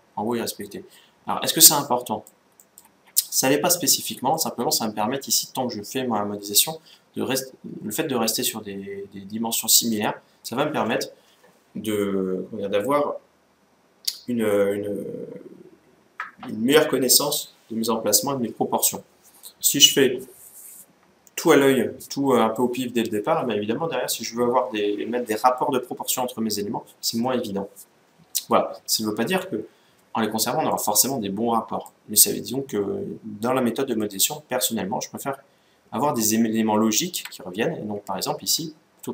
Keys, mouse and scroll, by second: 1.4-4.0 middle drag, 4.1-5.8 middle drag, 9.7-11.3 middle drag, 30.5-32.2 middle drag, 38.3 ctrl+z.